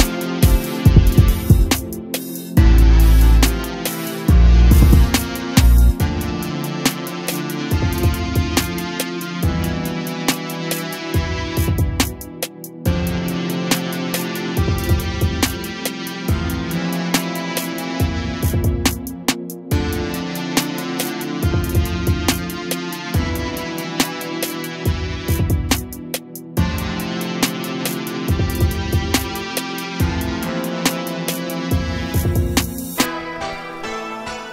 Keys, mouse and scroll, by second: 1.1 click, 6.1 click, 6.6 click, 8.3 click, 9.4 click, 10.4-11.7 shift+middle drag, 11.7 click, 12.7 click, 16.2 click, 16.8 shift+a, 21.7-22.4 scroll down 6, 22.4-23.5 middle drag, 23.5 click, 23.8 middle click, 24.3 click, 24.8 shift+a, 29.0-30.5 scroll up 1, 30.5 click, 31.9-34.5 middle drag.